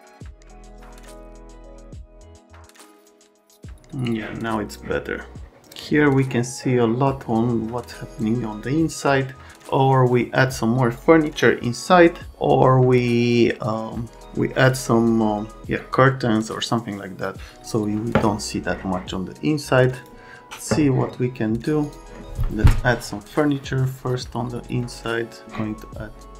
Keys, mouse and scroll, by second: 0.8 click, 1.2 click, 1.7 click, 2.3 click, 4.0 click, 20.0 click, 21.8 click.